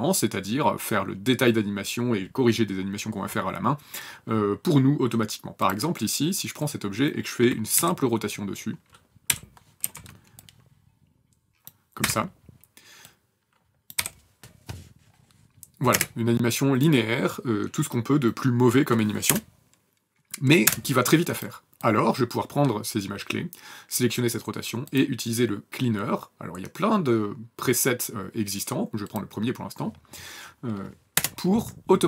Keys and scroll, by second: 7.7 r, 9.3 r, 9.8 w, 12.0 v, 14.0 n, 14.4 KP_0, 15.9 space, 19.2 KP_0, 20.6 KP_0, 31.1 KP_0.